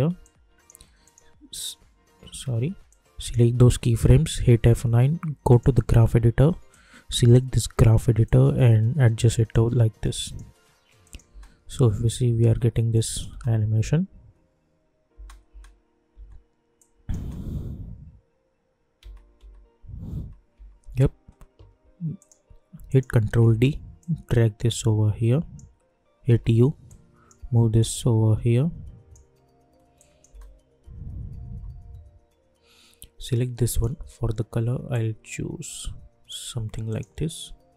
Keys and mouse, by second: 2.4 ctrl+z, 2.8-4.3 drag, 4.3 F9, 5.5-10.2 drag, 11.3 space, 12.9 click, 13.3 space, 16.7 click, 17.1 space, 22.1 click, 23.4 ctrl+d, 24.0-26.2 drag, 26.2 u, 26.8-29.9 drag, 30.2 space, 33.6-36.9 drag.